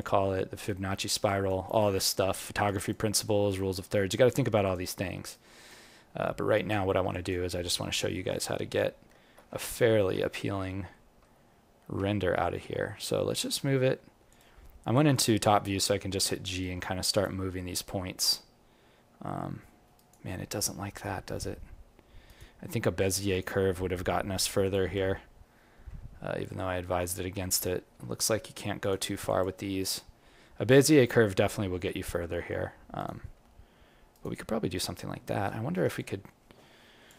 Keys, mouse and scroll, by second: 0.0 alt+click, 0.8 alt+middle click, 1.2 alt+right click, 1.6 alt+click, 2.3 alt+middle click, 2.6 alt+right click, 2.9 alt+click, 4.6 click, 5.3 right click, 6.5 click, 7.1 alt+click, 7.9 ctrl+middle click, 7.9-8.3 ctrl+scroll down 1, 8.3 ctrl+middle click, 10.3 alt+middle click, 10.9 alt+middle click, 11.9 g, 15.5 g, 17.0 click, 17.6 g, 25.8 g, 29.6 g.